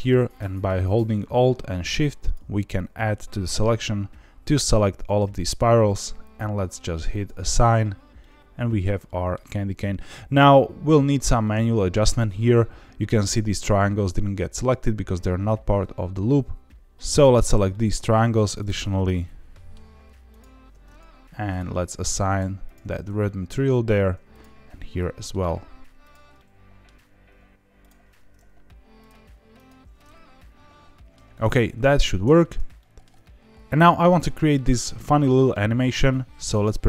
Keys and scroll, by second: 32.2 Tab, 36.7 shift+a.